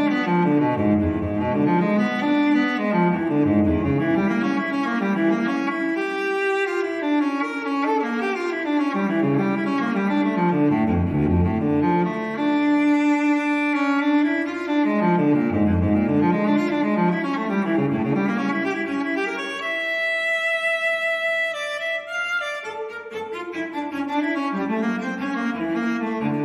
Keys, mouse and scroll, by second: 1.1 click, 3.6 click, 5.3 ctrl+click, 6.2 ctrl+click, 7.6 ctrl+click, 14.0 click, 17.1 click, 19.0 click, 20.6-20.9 scroll down 1, 21.9 click, 23.5 ctrl+click, 25.5 click.